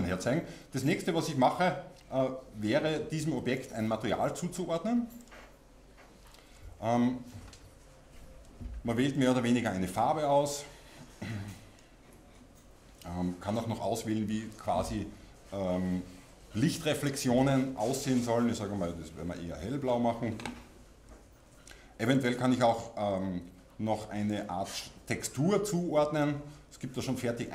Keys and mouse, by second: 9.2-13.3 drag, 17.4-24.4 drag, 26.4-27.5 drag.